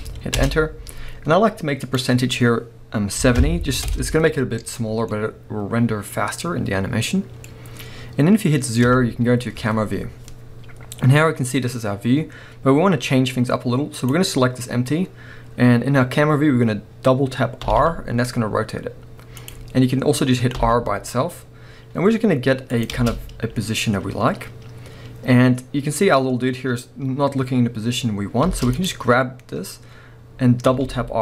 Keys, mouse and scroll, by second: 0.4 Return, 0.4-5.1 drag, 3.9 Return, 4.9 scroll down 1, 5.1-13.9 middle drag, 8.9 KP_0, 10.1-11.9 scroll down 2, 11.9-13.2 scroll down 1, 13.2-13.9 scroll up 2, 13.9-14.5 drag, 14.5-17.2 scroll up 1, 17.6 r, 19.5 click, 20.5 r, 22.8 click, 22.9 space, 28.5 space, 28.7-29.5 drag, 29.5-30.7 scroll up 1, 30.7 r.